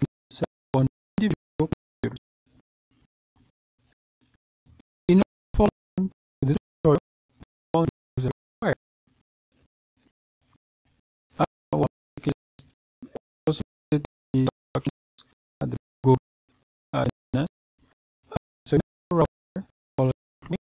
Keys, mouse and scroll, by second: 4.4-6.2 scroll down 2, 7.7 click, 12.2-13.1 scroll down 2, 13.4-14.1 scroll down 2, 14.1-15.4 scroll up 2, 20.6 click.